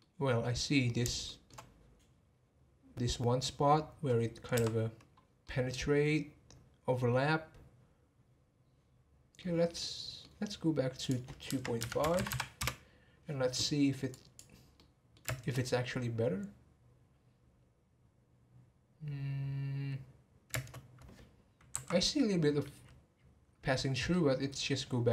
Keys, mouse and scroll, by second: 1.2-4.2 shift+middle drag, 5.0-5.4 scroll down 1, 5.4-8.5 middle drag, 9.8-11.0 middle drag, 11.0-12.3 drag, 12.3 m, 14.1-14.7 drag, 14.7-15.2 middle drag, 15.2 space, 20.5 space, 21.8 Right, 22.1-25.1 middle drag.